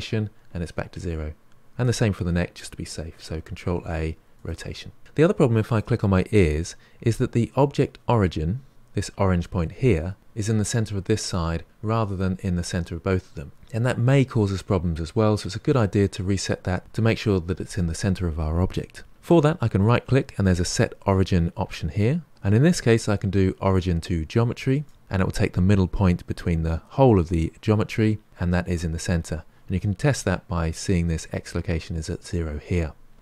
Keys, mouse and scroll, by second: 1.7 click, 3.5 ctrl+a, 5.6 click, 19.8-33.2 right drag.